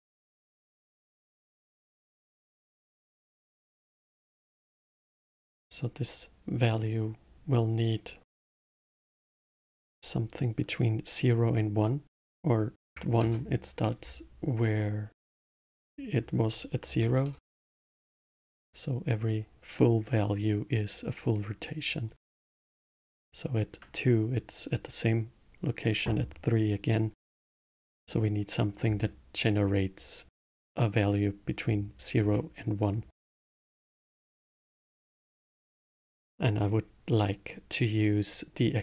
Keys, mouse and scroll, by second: 3.3-3.8 scroll up 2, 3.8-6.5 middle drag, 6.5-9.5 drag, 15.8-18.9 drag, 19.0-22.1 drag, 27.3-30.4 middle drag, 30.4-36.2 middle drag, 37.1 click.